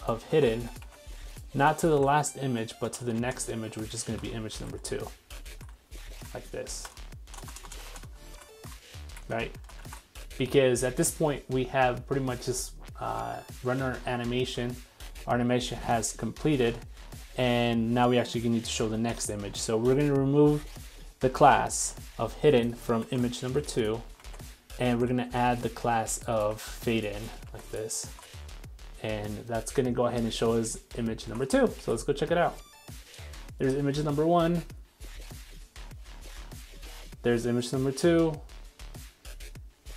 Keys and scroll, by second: 0.4 super+c, 2.1 super+x, 8.2 super+s, 23.0 super+c, 24.2 super+c, 24.3 super+v, 24.9 super+s, 26.5 super+s, 26.7 super+c, 28.1 super+s, 31.4 super+Tab, 31.8 super+r.